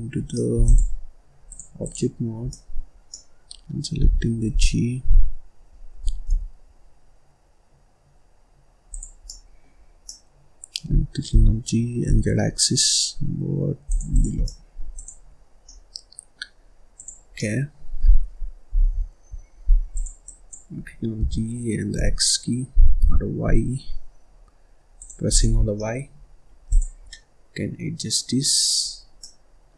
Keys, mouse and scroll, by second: 0.2 scroll down 1, 0.3 middle click, 0.6 click, 1.4-2.4 drag, 2.4 middle click, 2.9 scroll up 1, 3.0 middle click, 3.9 g, 9.1 scroll down 1, 9.2 middle click, 9.7 scroll up 1, 10.0-11.2 middle drag, 11.2 g, 14.0 click, 14.4 middle click, 14.9 click, 15.3 scroll down 1, 15.6-16.9 middle drag, 16.9 click, 17.2 scroll down 1, 17.4-18.6 middle drag, 19.9 click, 20.2 click, 21.1 g, 25.2 click, 25.5 scroll down 1, 25.7 middle click, 26.1-26.6 scroll up 1, 26.6 click, 27.0-28.4 middle drag, 28.4-29.1 scroll up 4, 29.1 middle click.